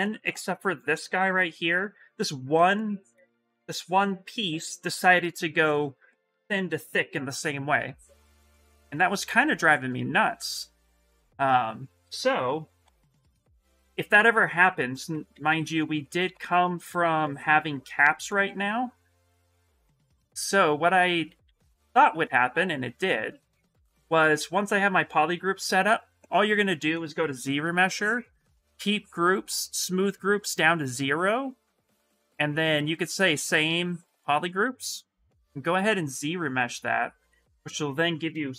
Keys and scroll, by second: 12.2 ctrl+z, 12.6 ctrl+z, 14.6 ctrl+z, 14.8 ctrl+z, 15.1 ctrl+z, 15.2 ctrl+z, 15.4 ctrl+z, 15.5 ctrl+z, 15.7 ctrl+z, 16.1 ctrl+z, 16.4 ctrl+z, 17.0 ctrl+z, 17.5 ctrl+z, 17.8 ctrl+z, 19.0 ctrl+shift+z, 19.2 ctrl+shift+z, 19.3 ctrl+shift+z, 19.7 ctrl+shift+z, 19.9 ctrl+shift+z, 20.0 ctrl+shift+z, 20.2 ctrl+shift+z, 20.6 ctrl+shift+z, 20.7 ctrl+shift+z, 20.9 ctrl+shift+z, 21.0 ctrl+shift+z, 21.2 ctrl+shift+z, 22.0 ctrl+z, 22.9 ctrl+z, 27.1 shift+m, 37.1 s, 38.4 shift+m.